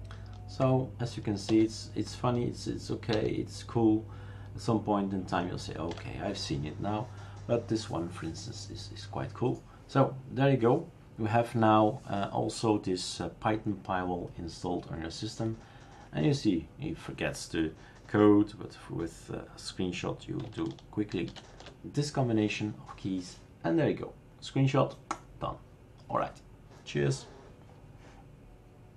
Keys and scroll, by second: 1.5 alt+shift+n, 3.1 alt+shift+n, 21.3 alt+shift+u.